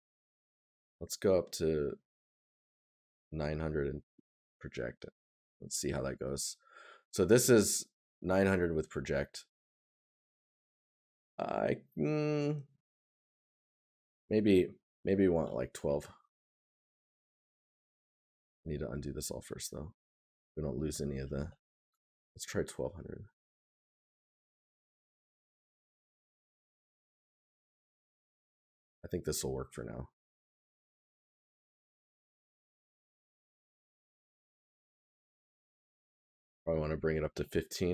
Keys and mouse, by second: 6.5 right click, 18.2 right click, 23.7 right click, 28.5 right click, 33.5 right click.